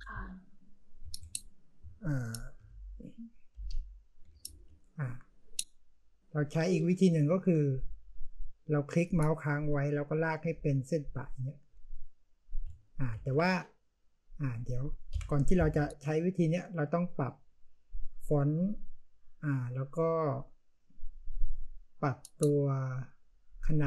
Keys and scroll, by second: 0.0-1.5 typing, 2.5-4.8 typing, 13.1 ctrl+z, 15.0 Delete.